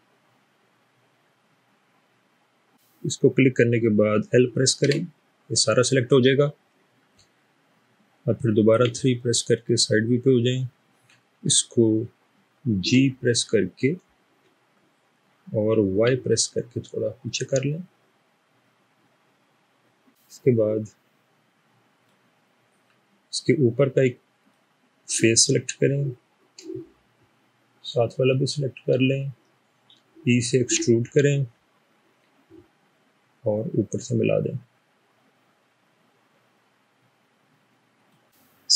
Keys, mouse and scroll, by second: 4.9 l, 8.7 typing, 12.8 typing, 16.0 typing, 30.8 e, 38.2 middle click.